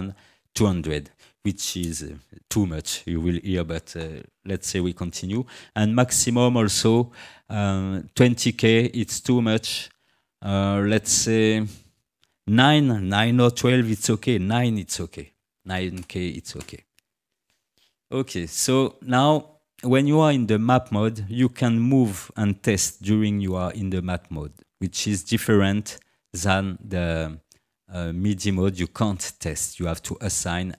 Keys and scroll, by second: 15.3 9, 15.6 0, 16.6 Return.